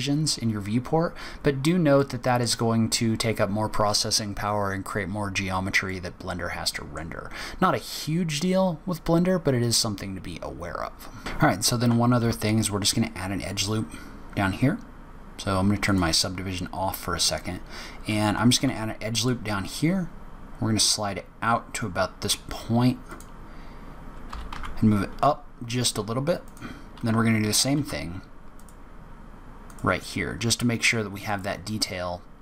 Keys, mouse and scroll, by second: 0.7 scroll up 2, 1.2-1.6 scroll down 2, 1.9 middle click, 5.8 middle click, 11.2-14.4 scroll up 6, 14.7-15.8 scroll down 3, 15.8 click, 16.8-17.3 scroll up 3, 18.5 ctrl+r, 27.7 ctrl+r, 30.2-30.8 scroll down 1, 30.8-31.4 scroll down 1, 31.4 click.